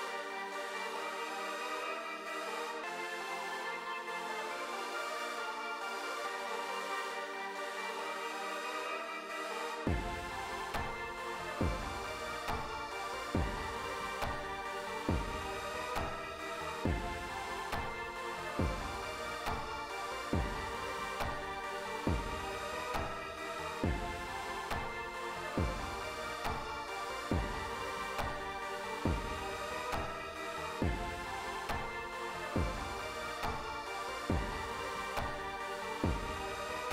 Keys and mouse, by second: 1.0 click, 3.3-6.7 drag, 7.8 click, 17.6 space, 19.6 click, 20.8 click, 22.9-24.8 drag, 26.1 click, 32.3 click, 35.6-36.9 drag.